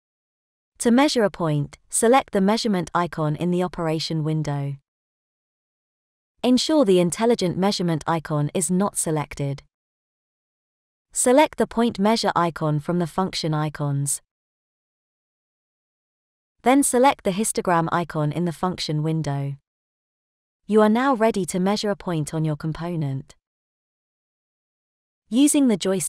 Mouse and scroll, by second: 4.4 click, 10.3 click, 15.1 click, 19.9 click.